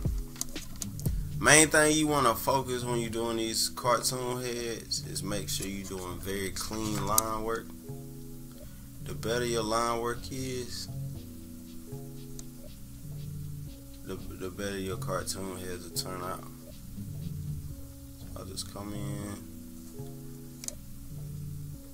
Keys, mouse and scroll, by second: 0.2 scroll down 2, 2.5-5.0 drag, 6.5 ctrl+z, 8.3-11.3 drag, 13.3 click, 17.5 click, 21.5 click.